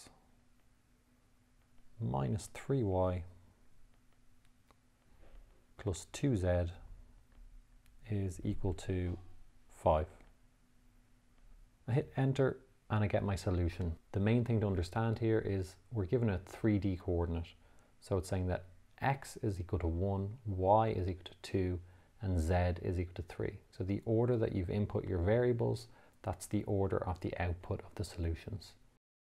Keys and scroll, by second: 0.9 x, 2.1 -, 2.8 3, 4.4 y, 6.7 2, 7.6 z, 9.0 =, 10.6 5, 12.5 Return.